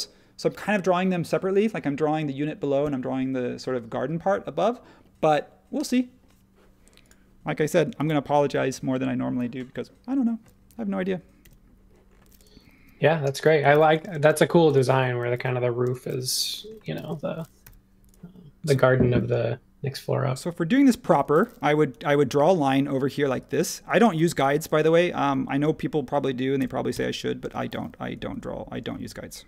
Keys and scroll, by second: 7.9 super+s, 11.4 super+1, 13.7 h, 15.1-17.6 typing, 21.1 space, 21.9 |, 23.6 space, 24.4 m, 26.6 2, 26.9 Return, 28.3 super+1.